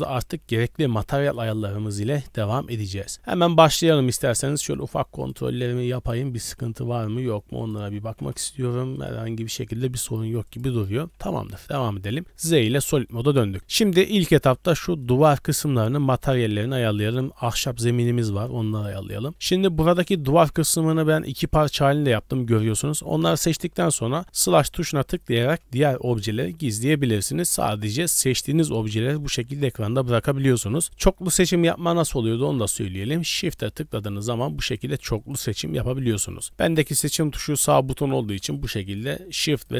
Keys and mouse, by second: 11.1 middle click, 12.1 z, 13.0-13.9 middle drag, 15.0-16.9 middle drag, 19.5 middle click, 21.6 g, 22.9-26.6 drag, 28.9-29.8 drag, 32.8 click.